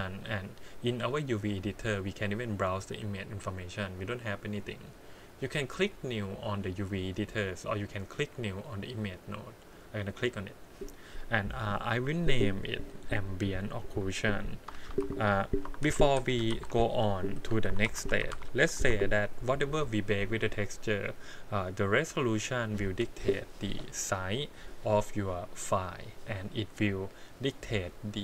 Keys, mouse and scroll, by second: 0.9 click, 2.4-4.6 drag, 10.1-17.8 drag, 17.8 c.